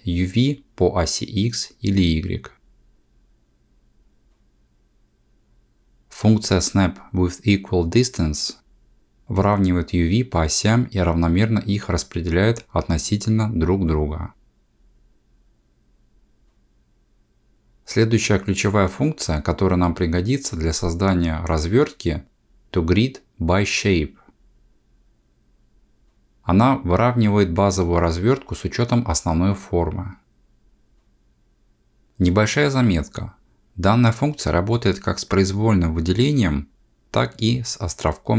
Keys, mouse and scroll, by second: 0.0 alt+click, 2.6 click, 4.1 alt+click, 5.3 click, 6.6 ctrl+z, 7.0 ctrl+z, 7.4 ctrl+z, 10.5 click, 12.1 g, 16.7 ctrl+z, 17.3 ctrl+z, 27.1 a, 30.8 click, 34.8 ctrl+z, 36.1 3, 37.0 alt+a, 37.6 c.